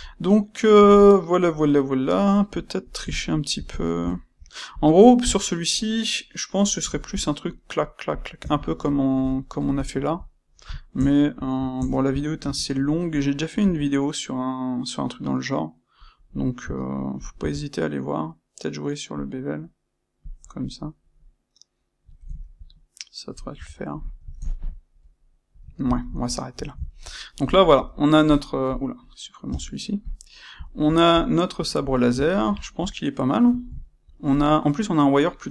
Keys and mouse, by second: 4.6 click, 8.6-20.2 shift+middle drag, 12.3 space, 20.2 click, 20.6-28.6 middle drag, 23.4 a, 28.6 click, 30.6-35.5 shift+middle drag.